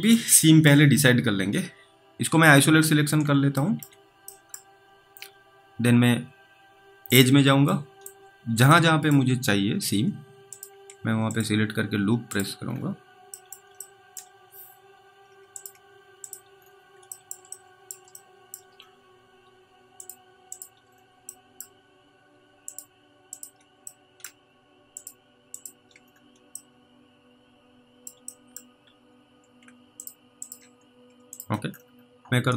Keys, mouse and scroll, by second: 0.2 alt+middle click, 0.7 middle click, 2.5 click, 3.7 alt+z, 3.9 middle click, 4.6 middle click, 4.7-5.6 scroll up 2, 7.1 click, 8.0 middle click, 9.0 alt+middle click, 9.3-9.9 scroll up 3, 10.5 click, 11.3 ctrl+click, 12.6-13.4 scroll down 3, 13.4 middle click, 14.1 alt+middle click, 14.3-14.9 scroll up 2, 15.6 ctrl+click, 16.5-17.0 scroll down 3, 17.2 alt+middle click, 17.8 middle click, 18.5 alt+middle click, 18.8-19.4 scroll up 2, 20.0 ctrl+click, 20.9-21.5 scroll down 1, 21.5-21.8 scroll down 1, 21.8 middle click, 21.8-22.7 scroll up 2, 22.7 ctrl+click, 24.2 middle click, 25.0 ctrl+click, 26.0 scroll down 2, 26.9 alt+middle click, 28.6 middle click, 28.8-29.5 scroll up 3, 30.0 ctrl+click, 30.4 ctrl+double click, 31.7-32.1 scroll down 3, 32.1 alt+middle click.